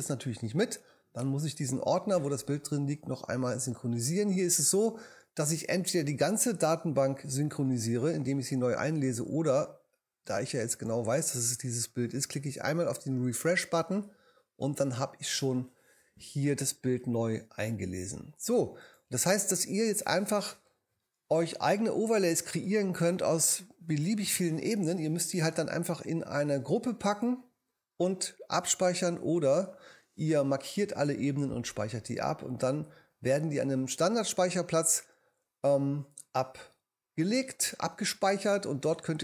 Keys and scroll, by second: 28.6 BackSpace.